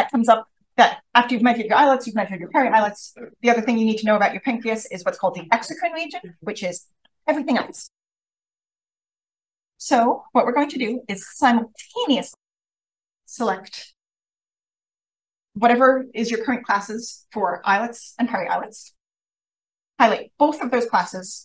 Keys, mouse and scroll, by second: 10.6 click, 11.8 shift+click, 14.2 click, 15.5 shift+click, 20.6-21.3 scroll up 1, 21.3 click, 21.3 scroll up 1.